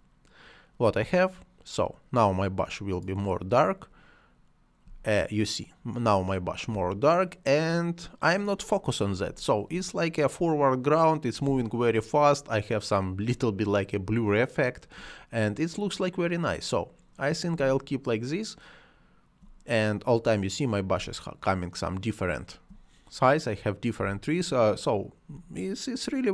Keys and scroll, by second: 4.8 space, 9.3 space, 11.5 space, 17.6 space, 21.0 space, 24.0 space.